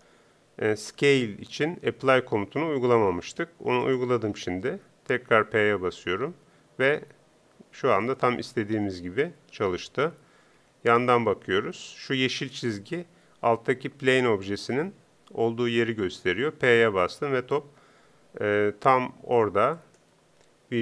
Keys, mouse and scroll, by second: 5.4 p, 8.4 p, 10.0 KP_3, 10.6 KP_5, 16.8 p, 18.3 p, 19.8-20.8 drag.